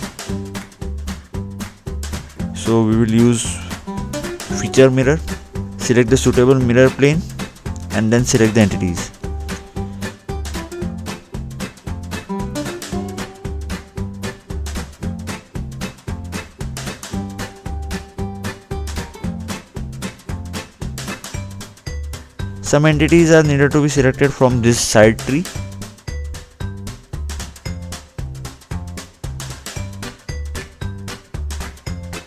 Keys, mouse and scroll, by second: 0.1 click, 0.8 scroll down 2, 1.6 scroll up 2, 2.2 middle click, 3.5 click, 4.8-5.5 scroll down 2, 7.7 middle click, 8.4-8.9 scroll down 2, 10.2 scroll down 2, 10.5-11.1 scroll up 2, 11.5 scroll down 2, 12.3 scroll up 2, 14.7 scroll up 1, 15.1 scroll down 1, 16.3-18.1 scroll down 1, 19.8-21.3 scroll up 2, 24.3-25.5 scroll down 2, 26.8 click, 28.2 scroll up 2, 29.4 middle click, 31.6 scroll down 2.